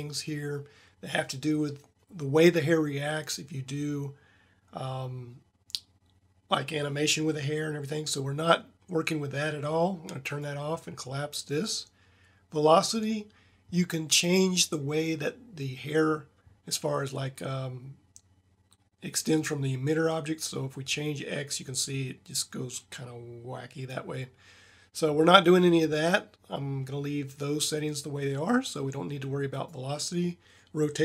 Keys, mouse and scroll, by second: 10.2-11.6 drag, 11.7-13.1 drag, 29.5 click, 29.7-30.4 drag.